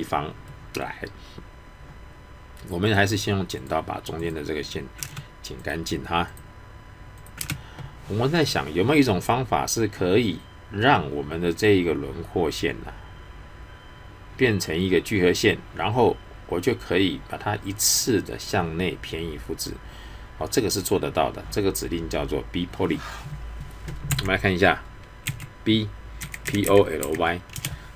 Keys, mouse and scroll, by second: 0.1-0.5 scroll up 1, 0.5 middle click, 1.4-2.8 scroll up 1, 3.0 click, 5.0 space, 5.6 click, 7.4 space, 25.2-27.0 typing, 27.5 Return.